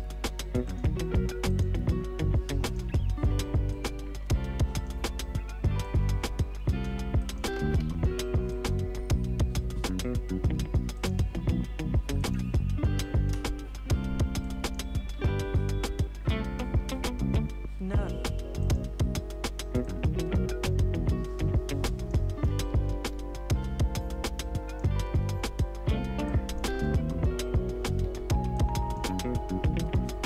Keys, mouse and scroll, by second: 0.7 right click, 1.5 click, 4.7-7.2 shift+drag, 7.8 r, 8.5 click, 10.9 click, 13.4 Return, 14.4 click, 15.1 space, 18.6-22.5 drag, 22.5-23.1 typing, 23.9-25.3 drag, 25.3-26.7 typing, 26.3 click, 28.5 click, 29.5 k.